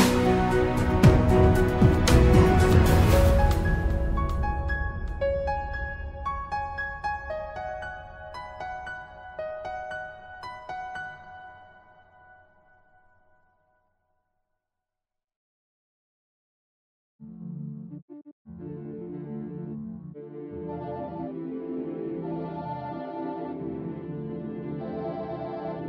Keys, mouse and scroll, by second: 0.0-1.2 scroll down 2, 1.2-1.9 middle drag, 1.9-4.9 scroll down 1, 4.9 scroll down 1, 6.4 click, 11.6-13.9 right drag, 13.9-16.5 middle drag, 16.5-17.4 scroll up 2, 20.8 Tab, 21.5 middle click, 22.1-22.7 scroll up 2, 22.7-24.1 middle drag, 24.1 ctrl+r.